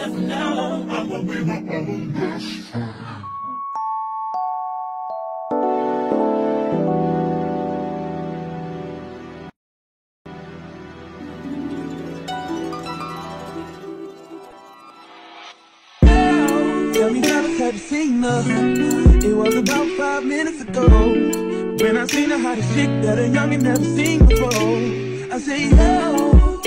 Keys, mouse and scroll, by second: 3.5 shift+middle click, 4.3-7.0 drag, 5.9 ctrl+p, 7.0 middle click, 8.0 click, 8.1 middle click, 8.4 click, 8.5-10.9 shift+middle drag, 9.0 shift+d, 9.4 ctrl+a, 10.9 click, 10.9 middle click, 11.4-12.8 drag, 12.2 a, 12.8 middle click, 12.8-26.6 drag, 13.4 a.